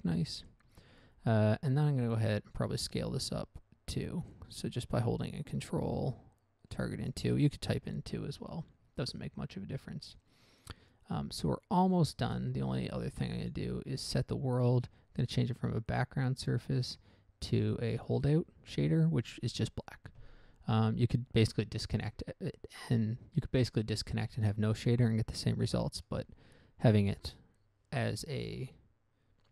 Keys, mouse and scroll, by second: 0.2 scroll down 1, 0.5 middle click, 0.8 middle click, 1.1 shift+middle click, 1.5-1.8 scroll up 1, 2.8 Tab, 3.2 s, 7.1 ctrl+click, 7.8 Tab, 10.3 scroll down 1, 10.7 middle click, 12.2 middle click, 12.5 scroll up 1, 13.7 click, 16.2 click, 18.3 click, 26.0 middle click, 26.5 middle click, 27.1-27.4 scroll down 1, 27.4 middle click, 27.7 middle click.